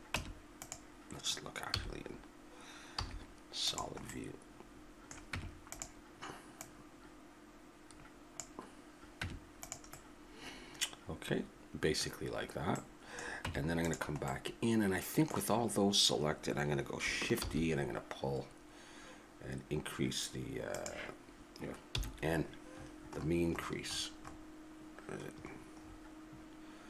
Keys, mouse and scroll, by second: 0.2 Tab, 1.7 z, 3.0 z, 5.3 Tab, 6.6-8.5 drag, 9.2 Tab, 10.1-11.9 middle drag, 13.4 Tab, 13.4 click, 13.9 click, 17.4 shift+e, 22.0 n, 24.6-26.8 middle drag.